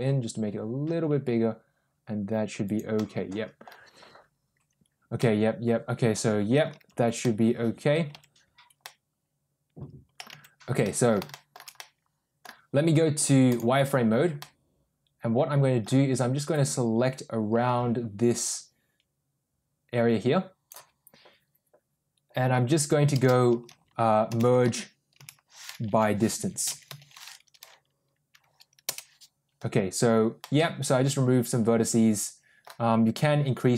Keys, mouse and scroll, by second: 2.9 middle click, 5.1-6.5 middle drag, 7.1 middle click, 8.0 Tab, 8.7-10.0 middle drag, 10.2 Tab, 10.7 middle click, 11.2 shift+middle click, 11.6 middle click, 13.4 click, 14.3-15.7 middle drag, 16.4-20.6 drag, 23.0 space, 30.3-32.6 middle drag.